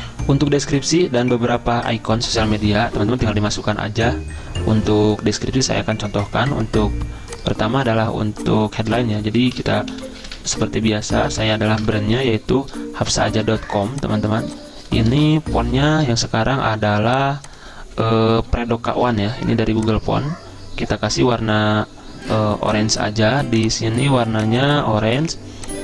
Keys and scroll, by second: 9.4-12.1 typing, 12.2 Escape, 13.8-15.1 typing, 15.9 ctrl+t, 17.0-19.7 typing.